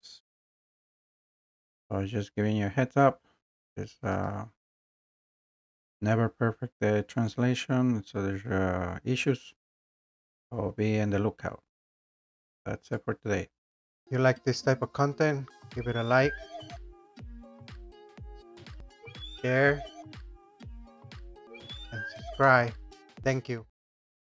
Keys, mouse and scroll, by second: 12.9 click.